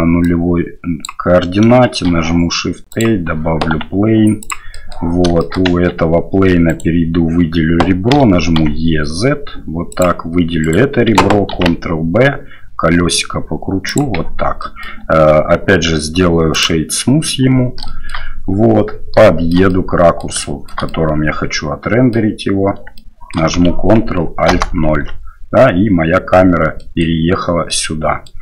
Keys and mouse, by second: 0.3 click, 1.9 shift+a, 3.7 s, 4.7 click, 5.4 shift+click, 5.6 Tab, 6.7 right click, 8.1 e, 10.6 right click, 11.5 ctrl+b, 14.2 Tab, 14.6 middle drag, 15.7 q, 16.9 middle click, 17.8 shift+middle click, 19.2 shift+middle click, 19.7 middle click, 20.4 shift+middle drag, 20.9-22.1 middle drag, 23.0 shift+middle click, 24.5 ctrl+alt+KP_0, 26.8 middle drag, 27.6-28.2 middle drag.